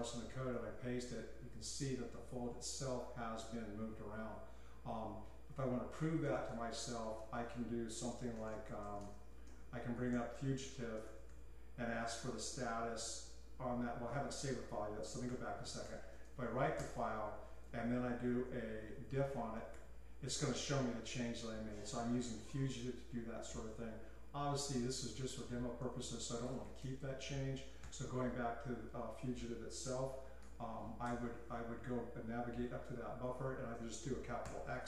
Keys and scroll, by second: 0.0-0.5 typing, 6.3-7.2 typing, 8.3 Tab, 8.5 Tab, 8.8 Escape, 9.0 Escape, 9.4-13.3 typing, 15.2-16.8 typing, 18.4-20.2 typing, 26.4-27.8 typing, 30.4 :, 30.8 q, 31.0 Return, 32.6 ctrl+k, 32.9 ctrl+k, 34.4 shift+x.